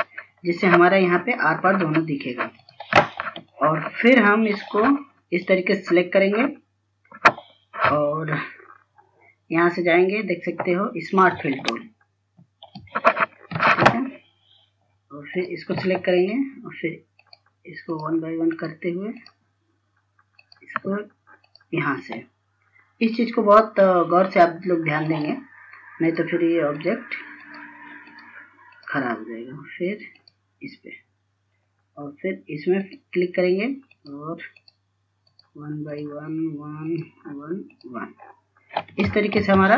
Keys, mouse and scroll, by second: 2.1 scroll up 1, 3.7 scroll down 1, 4.3 click, 4.8 F2, 5.1 click, 8.4-11.3 scroll up 1, 11.3-15.4 drag, 13.4-14.2 typing, 17.2-35.9 drag.